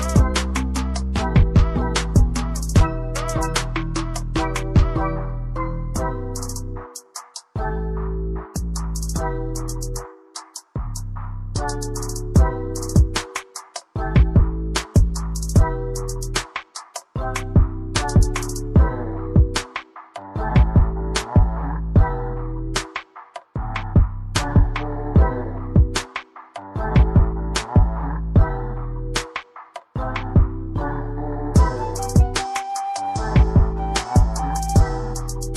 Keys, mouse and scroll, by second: 1.3 scroll up 1, 2.4 click, 19.6 ctrl+z, 19.8 ctrl+click, 22.9 click.